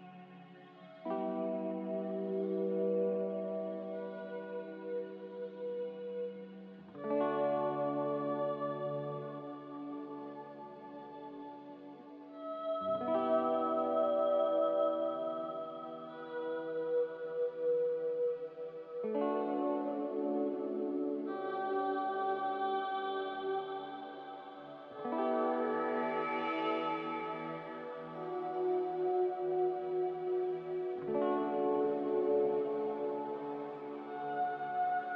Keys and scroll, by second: 13.4 ctrl+c, 13.7 ctrl+r, 30.3 ctrl+c, 30.5 ctrl+r.